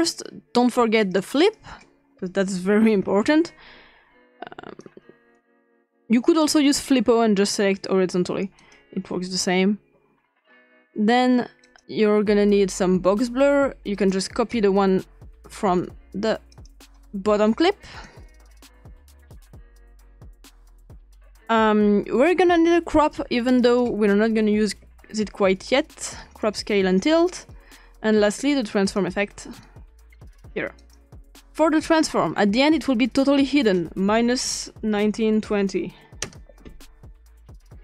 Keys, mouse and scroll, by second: 0.0 click, 1.0 click, 1.6-2.6 drag, 2.6-3.2 typing, 4.8-6.5 drag, 8.6 click, 11.7 click, 14.0 click, 16.5 click, 18.0-19.3 drag, 20.5 click, 22.4 click, 23.5 click, 24.1-24.8 typing, 26.2 click, 28.9 click, 29.6 click, 30.8 click, 33.4 click, 34.2-36.4 typing, 36.2 Return.